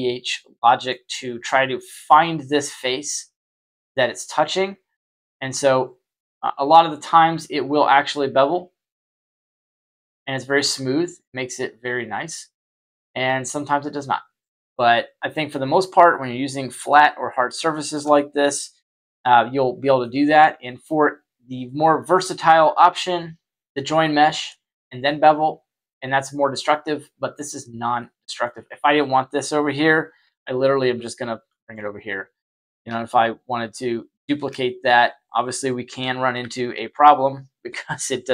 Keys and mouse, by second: 3.5-3.9 middle drag, 5.4 click, 6.2-7.3 middle drag, 8.0-9.1 drag, 9.8 click, 11.2-12.2 drag, 12.5-13.9 middle drag, 14.2 right click, 16.1-16.8 middle drag, 17.6 shift+middle drag, 18.1-20.0 middle drag, 21.6-21.9 middle drag, 27.9-28.4 middle drag, 29.1 right click, 30.2 y, 30.7 y, 31.4 middle click, 34.1 shift+d, 35.5-36.0 middle drag, 36.3 y.